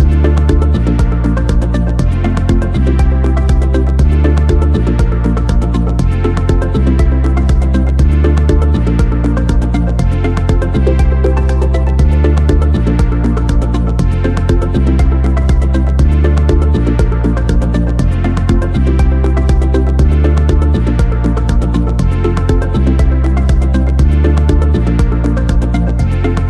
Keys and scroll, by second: 4.6 r, 11.0 ctrl+c, 12.4 m, 17.3 ctrl+c.